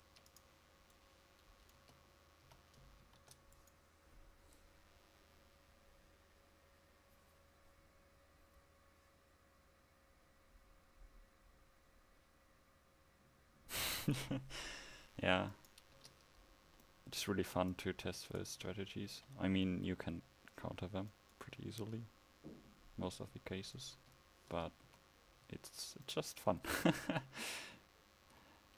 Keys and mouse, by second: 1.9 Tab, 2.5 a, 3.1 ctrl+s, 16.1 Tab, 17.5 a, 19.2 KP_1, 24.0 Tab, 24.9 a.